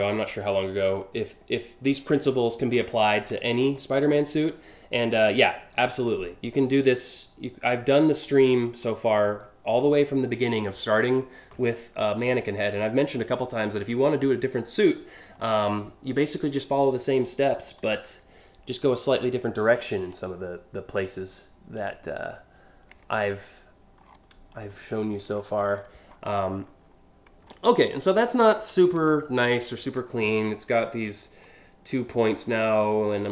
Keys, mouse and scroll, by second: 0.5 click, 2.3 p, 3.3 click, 4.7 alt+click, 5.6 alt+click, 7.8 alt+click, 8.5 alt+click, 17.3 ctrl+click, 18.9 ctrl+click, 20.7 ctrl+click, 23.7 scroll down 2, 24.2 scroll up 2, 24.9-25.8 scroll down 3, 26.0-26.3 alt+scroll up 3, 27.1-27.9 alt+scroll up 7, 28.7 scroll up 1, 29.2 alt+scroll up 1, 30.5 ctrl+click, 31.1 ctrl+click, 32.1 ctrl+click, 32.5-33.3 ctrl+drag.